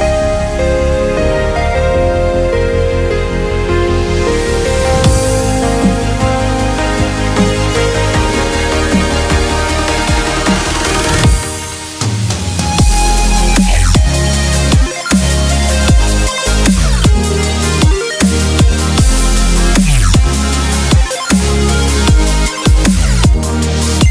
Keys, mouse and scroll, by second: 2.4 middle click, 3.7 z, 4.0 middle click, 4.6 click, 5.2 middle click, 5.7 Tab, 7.0 KP_7, 8.3 ctrl+m, 10.6 z, 11.5-11.9 middle drag, 12.3-13.0 middle drag, 13.3-15.1 middle drag, 15.1 Tab, 16.8 right click, 19.5 click, 19.7 middle click, 20.2 z, 22.7 right click, 22.9-23.9 middle drag, 23.9 right click.